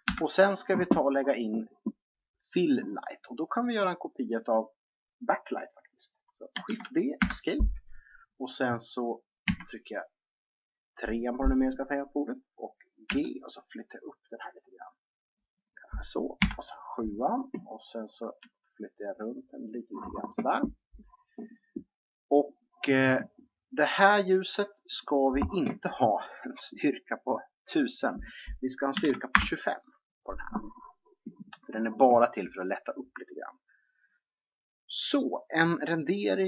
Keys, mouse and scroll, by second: 0.0 Escape, 3.4 right click, 6.6 shift+d, 9.4 KP_3, 13.0 g, 16.3 KP_7, 18.3 g, 24.8-26.7 drag, 27.8-29.6 drag.